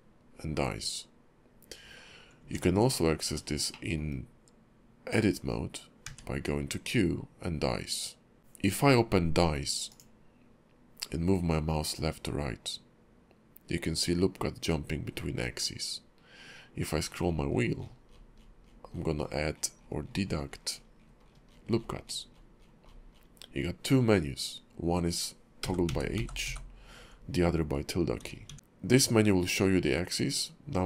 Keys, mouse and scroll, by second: 2.4 Tab, 3.7 shift+middle click, 6.0 q, 8.4 middle click, 8.4-8.8 scroll down 1.